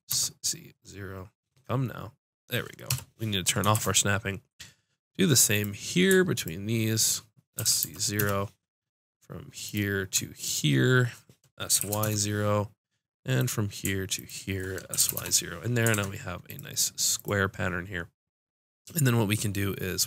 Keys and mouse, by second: 3.7 shift+Tab, 7.2 click, 7.5 s, 9.6-12.0 drag, 11.7 s, 13.3-14.6 drag, 14.9 s, 15.9 ctrl+Tab, 17.1 click.